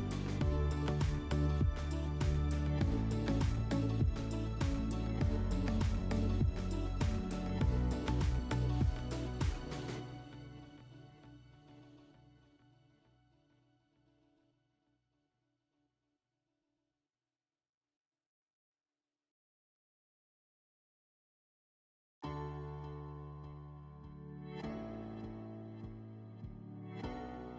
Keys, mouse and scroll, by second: 0.5 Delete, 23.6-25.1 drag.